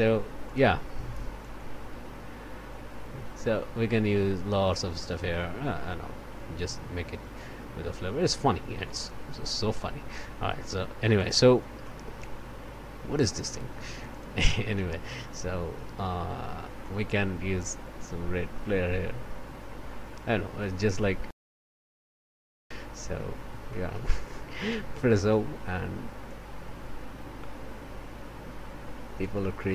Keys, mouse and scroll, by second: 0.4 click, 1.4-8.5 drag, 9.0 click, 11.2 click, 11.8 click, 12.2 scroll down 1, 13.9 click, 15.2 click, 16.8-20.3 drag, 20.9 click, 23.1-23.5 scroll down 1, 23.7 click, 24.9 o, 25.6 F5, 26.2-29.7 drag.